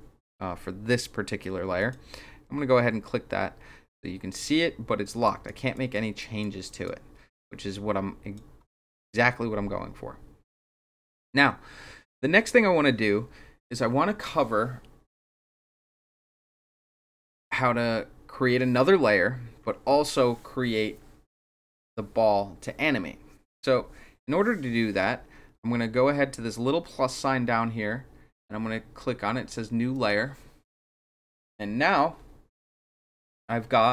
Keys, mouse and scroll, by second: 1.7 click, 5.2 click, 5.7 click, 6.1 click, 6.6 click, 7.3-8.3 drag, 29.9 click.